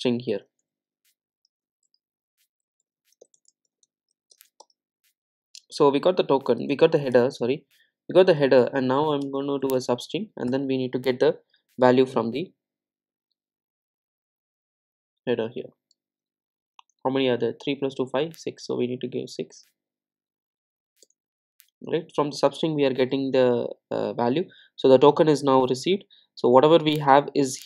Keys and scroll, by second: 7.2 Return.